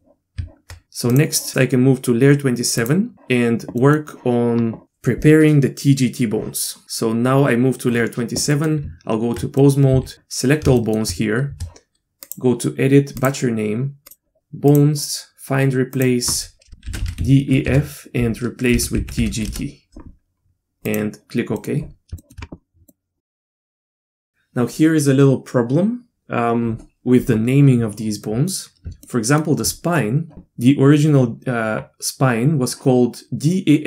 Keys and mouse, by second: 0.3 Tab, 1.1 click, 2.8 click, 3.8 middle click, 8.5 middle click, 9.3 Tab, 9.6 middle click, 10.0 a, 10.8 shift+middle click, 12.2-21.0 drag, 13.4 Tab, 21.6 middle click, 22.2 shift+middle drag, 22.9 middle drag, 23.3 middle click, 23.6 shift+middle click, 23.8 middle click, 23.9 drag, 24.0 middle click, 28.2 middle click, 29.0-29.4 shift+middle drag.